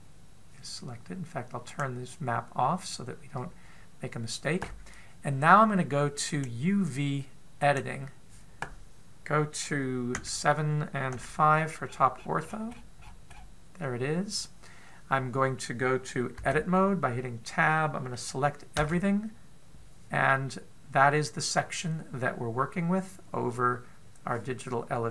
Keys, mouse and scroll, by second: 2.6 click, 7.1 click.